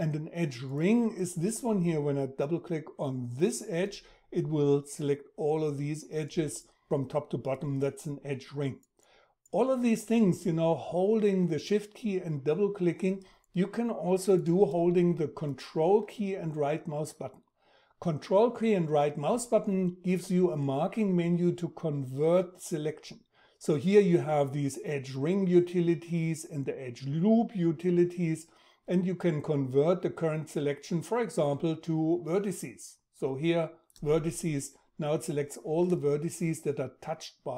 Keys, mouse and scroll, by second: 14.3-29.3 ctrl+right drag.